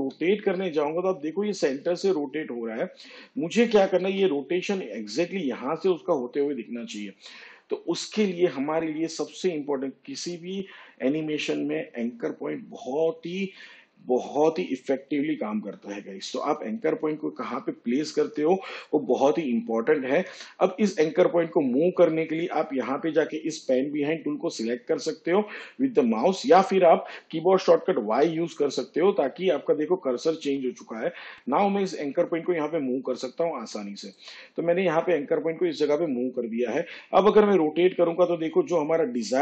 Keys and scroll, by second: 2.1 r, 6.2 ctrl+z, 30.3 y.